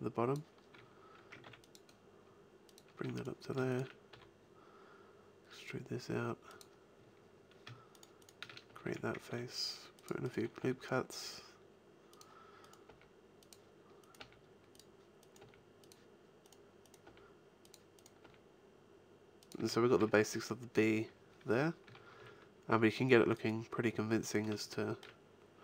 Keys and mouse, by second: 1.4 ctrl+r, 2.8 click, 3.0 a, 4.1 e, 8.7 f, 8.9 a, 9.3 ctrl+r, 10.6 g, 12.8 g, 14.1 g, 15.4 g, 17.0 g, 18.2 g, 19.5 a, 19.9 Tab, 21.8 a, 22.1 z.